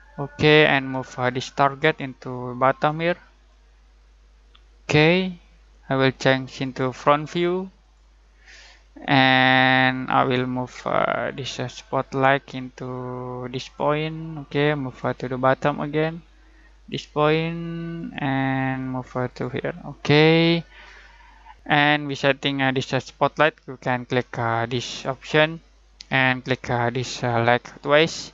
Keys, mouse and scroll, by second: 6.6 click, 21.5 click, 24.8 click, 27.5 click.